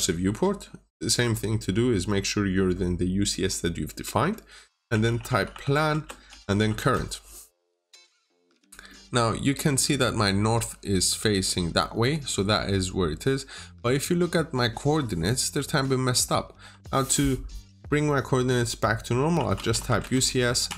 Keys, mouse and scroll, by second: 4.9-6.6 typing, 8.3-8.6 scroll up 1, 8.6 scroll down 1, 8.7 middle click, 19.2-20.5 typing, 19.9 Return.